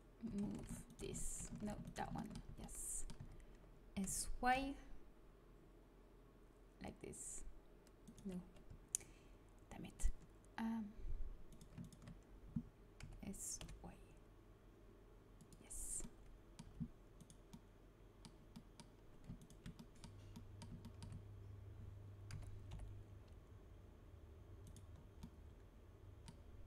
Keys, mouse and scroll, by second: 0.4 ctrl+z, 1.5 ctrl+z, 2.4 z, 3.1 z, 4.0 s, 9.9-11.7 drag, 11.4 right click, 11.7 middle click, 12.3 right click, 12.9 s, 16.5 a, 17.1-18.9 middle drag, 19.3-21.2 middle drag, 22.2 s, 22.5 middle click.